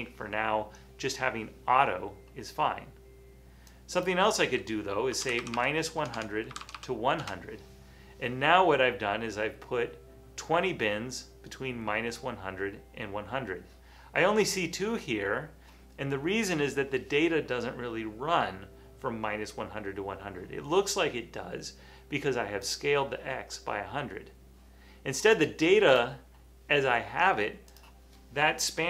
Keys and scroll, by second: 5.0-7.3 typing, 9.8-10.5 typing.